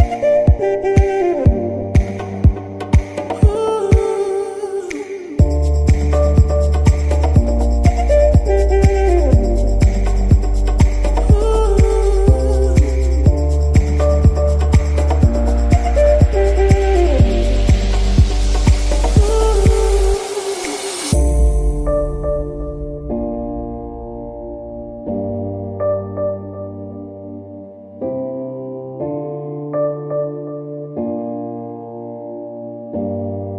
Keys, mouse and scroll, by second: 0.8 click, 0.9 alt+a, 1.4 ctrl+s, 1.6 scroll down 1, 3.5 space, 5.4 space, 7.3 space, 7.7-8.1 scroll up 2, 8.1 shift+middle click, 8.6-9.1 scroll up 2, 9.1 scroll down 2, 9.3 z, 9.6-10.1 middle drag, 10.1-10.5 scroll up 2, 10.5-11.5 middle drag, 11.5-11.9 scroll up 2, 11.9-12.8 shift+middle drag, 12.8 n, 15.5 click, 15.9 click, 16.5 click, 17.1 n, 19.1 Left, 22.1 Right, 24.4-25.2 scroll down 2, 25.2 KP_1, 25.6 z, 27.5-27.9 scroll up 2, 27.9-28.5 shift+middle drag, 28.5 scroll down 2, 28.7-29.1 middle drag, 29.1 scroll up 2, 29.4 z, 30.1-30.5 scroll up 2, 30.5-31.6 middle drag, 31.6-32.0 scroll up 2, 32.0-33.5 middle drag.